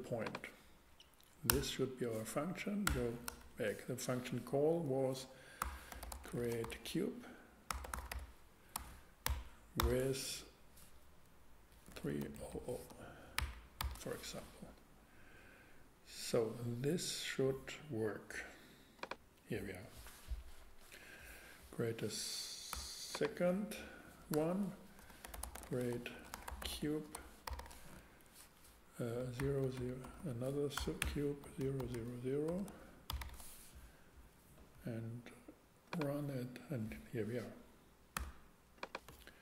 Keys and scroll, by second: 1.5 Return, 2.8 BackSpace, 3.3 Return, 5.6-6.6 typing, 7.7-9.4 typing, 11.9-13.4 typing, 22.7 x, 24.3 Return, 25.0-27.5 typing, 29.2-33.1 typing, 38.1 x.